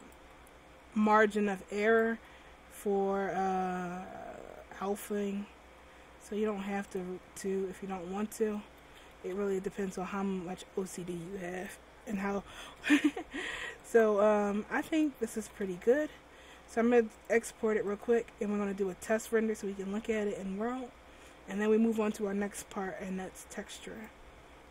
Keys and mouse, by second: 0.4 r, 2.4 r, 7.6-8.8 middle drag, 8.8 a, 9.0 a, 9.3 alt+r, 14.5 r, 15.4 a, 15.6 a, 15.9 alt+r, 24.0-24.7 right drag.